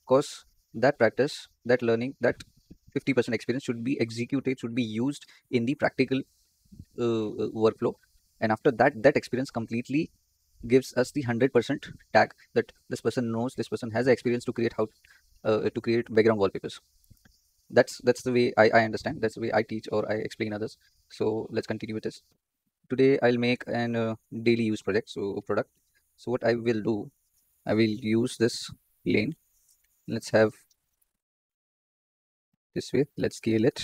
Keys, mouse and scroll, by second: 21.1-21.7 scroll up 2, 21.7-22.8 shift+middle drag, 22.8-23.2 scroll up 6, 23.4-23.8 shift+middle drag, 23.8-25.6 scroll down 2, 25.6 KP_7, 27.0 click, 27.8 z, 28.9 Tab, 30.1 1, 30.6 s, 33.1 s.